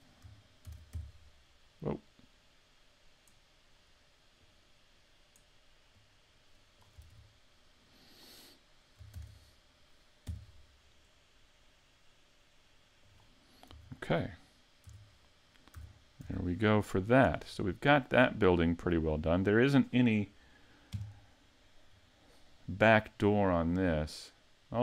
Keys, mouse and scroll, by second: 0.7 shift+f, 6.0 click, 7.1 super+z, 9.1 shift+d, 13.2 click, 13.7 a, 14.9 z, 15.1-15.8 scroll down 5, 15.8 a, 16.2 a, 16.5 middle click, 17.4-17.9 scroll up 3, 17.9 scroll down 2, 18.4 middle click, 19.3 scroll up 1, 20.9 KP_5, 21.9-22.5 scroll down 2, 23.7-24.1 scroll down 4.